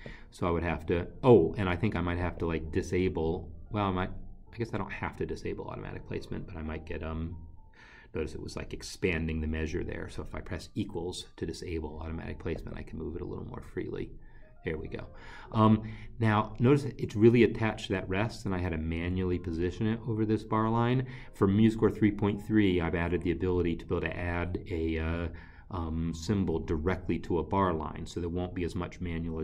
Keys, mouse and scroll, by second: 3.5 click, 10.8 =, 16.2 click.